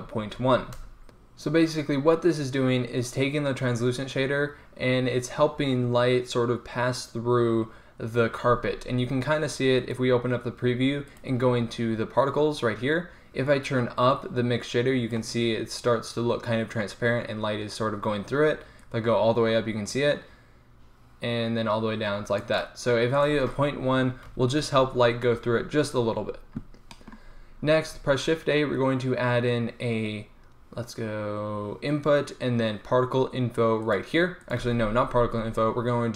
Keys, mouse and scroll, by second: 9.9-13.2 drag, 13.6-15.4 drag, 15.4-19.0 middle drag, 19.0-20.8 drag, 20.8-23.2 middle drag, 23.2-25.2 drag, 28.0 shift+a, 34.8 x, 35.2 shift+a.